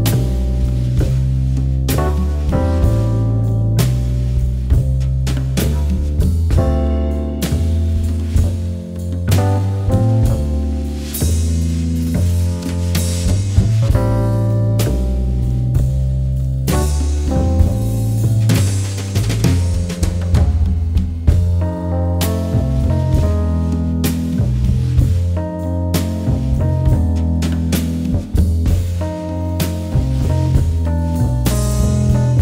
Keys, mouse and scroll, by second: 0.4 alt+scroll up 1, 0.4 click, 0.7 space, 1.7 alt+scroll up 1, 3.2 click, 4.8-5.3 alt+scroll up 1, 7.0-8.8 typing, 9.9 alt+click, 10.8 alt+click, 15.0 alt+click, 15.4 z, 17.8 click, 22.5 alt+click, 23.0 alt+click, 24.3 alt+click, 24.8 alt+click, 30.4-31.2 alt+scroll down 1, 31.7-32.1 alt+scroll up 1, 32.1 ].